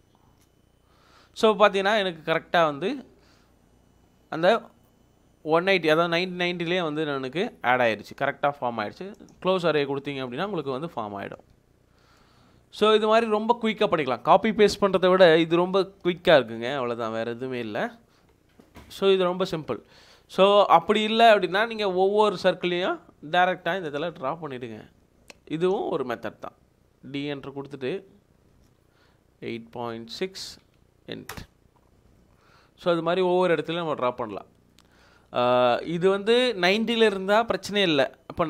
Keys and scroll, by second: 0.2 4, 0.3 Return, 10.2 Escape, 21.8 ctrl+z, 24.4 ctrl+z, 27.4 d, 28.5 Return, 30.1-31.2 typing, 31.3 Return.